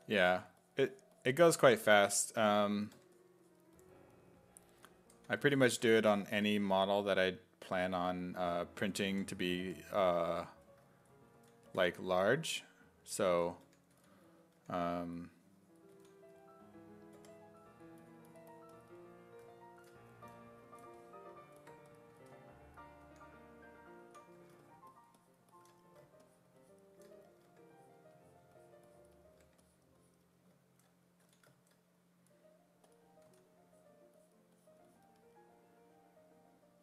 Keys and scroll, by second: 0.2 1, 2.0 1, 3.0 1, 4.8 s, 5.4 1, 7.9 s, 8.9-10.1 typing, 11.3-14.6 typing, 16.0 s, 17.2 4, 22.2 s, 23.1 1, 24.1 s, 24.4 1, 27.5 1, 29.5 1, 31.3 s, 33.3 s.